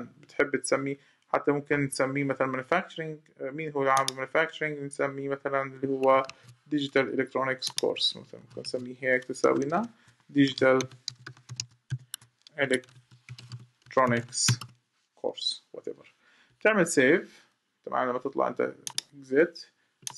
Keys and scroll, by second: 6.0 super+c, 8.4 super+v.